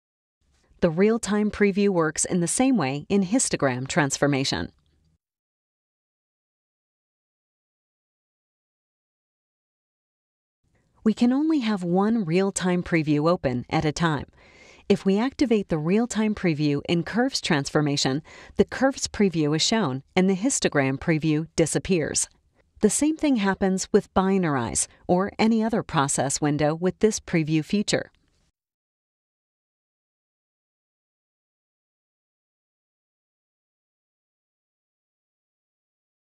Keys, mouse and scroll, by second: 3.2 click, 5.1-8.1 drag, 8.4 click, 9.9 click, 10.8 drag, 11.4 click, 12.9 drag, 13.5 click, 15.6 click, 22.5 click, 27.7 click, 29.1 click, 30.5 click, 31.6 click, 32.8 click.